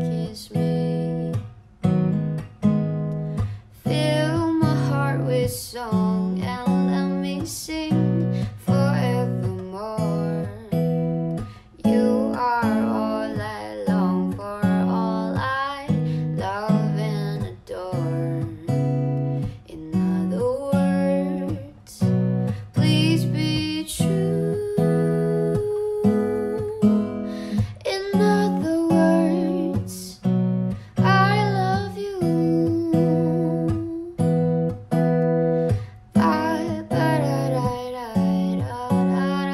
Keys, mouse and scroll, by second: 4.7-6.4 typing, 11.9-12.7 typing.